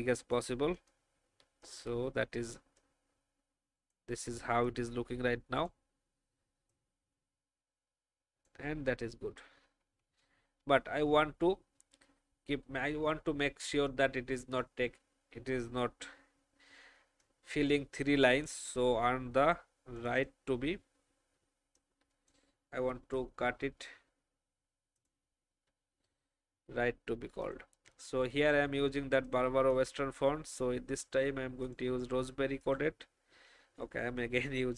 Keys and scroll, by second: 9.1 alt+shift+Up, 9.7 Up, 10.0 Up, 22.7 ctrl+x, 23.3 BackSpace.